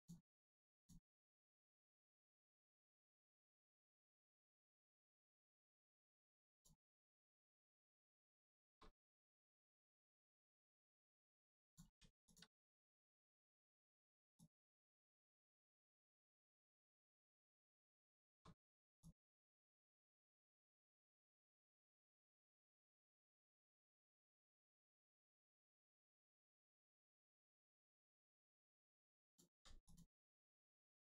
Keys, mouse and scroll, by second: 0.1 x, 0.7 click, 1.2 shift+scroll up 1, 1.4 shift+middle click, 1.7 scroll up 1, 2.7 click, 7.3 click, 8.1 middle click, 9.1 click, 11.8 x, 12.2 click, 12.7 shift+middle click, 14.3 click, 14.4 click, 16.5 x, 17.0 click, 17.5 shift+middle click, 18.9 click, 22.2 x, 22.6 click, 23.1 shift+middle click, 24.5 scroll down 1, 25.2 shift+middle click, 25.5 scroll up 1, 26.1 click, 29.5 x, 29.8 click, 30.1-30.5 scroll down 1, 30.5 Tab, 30.9 scroll down 1.